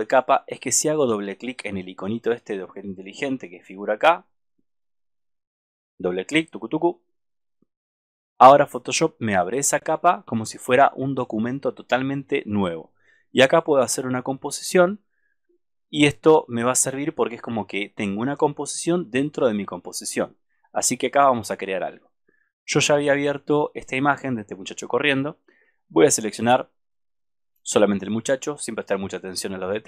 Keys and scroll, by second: 3.1 super+=, 5.7 super+-.